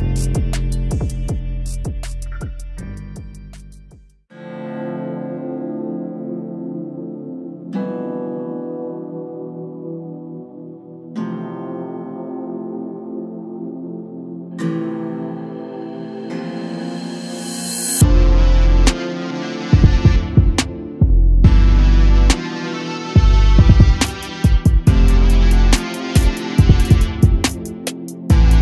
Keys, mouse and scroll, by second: 0.3-0.7 scroll down 4, 0.7 middle click, 1.1-1.6 scroll down 3, 1.6 Tab, 1.9 scroll down 1, 2.1-3.5 typing, 4.1-4.9 scroll down 2, 4.9-5.5 shift+middle drag, 5.5-6.0 scroll up 1, 6.0-6.4 shift+middle drag, 6.4 scroll up 1, 7.2 click, 7.8 KP_7, 8.5 scroll up 2, 9.2-9.5 shift+middle drag, 9.5-9.9 scroll up 4, 10.0 s, 10.7 ctrl+click, 12.0 shift+d, 12.4 g, 14.0 shift+d, 14.5 g, 16.5 shift+click, 17.0 shift+click, 17.8 click, 18.4 click, 19.0 shift+click, 19.5 shift+d, 19.9 g, 22.3-22.6 scroll down 1, 22.6-23.4 middle drag, 23.4 KP_0, 25.7 shift+click, 26.1 shift+click, 26.5 shift+click, 27.3-27.7 scroll up 1, 27.7 g.